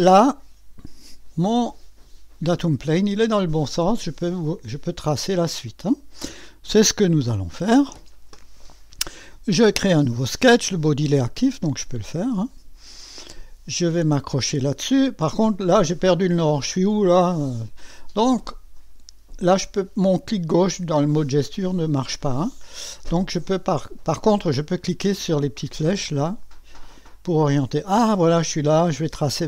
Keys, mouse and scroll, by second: 1.6 click, 5.8 click, 7.1 click, 12.1 click, 12.6 click, 13.8-15.0 scroll up 1, 16.0 right click, 21.6 click, 24.6 click, 25.7 click, 26.4 click.